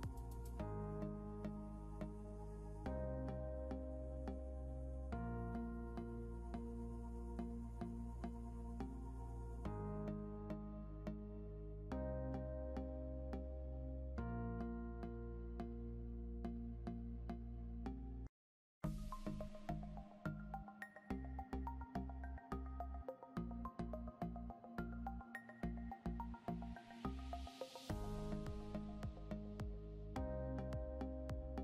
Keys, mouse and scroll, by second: 7.8 scroll up 1, 25.8 double click.